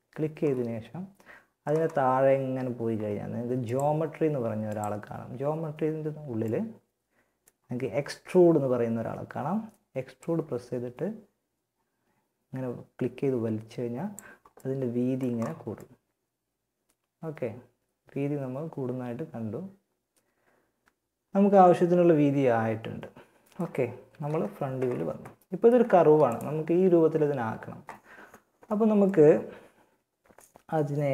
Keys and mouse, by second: 2.8-5.6 drag, 5.6 middle click, 9.4-11.1 drag, 14.2 middle click, 22.1 middle click, 23.5 KP_1, 25.2 a, 25.5-28.2 drag.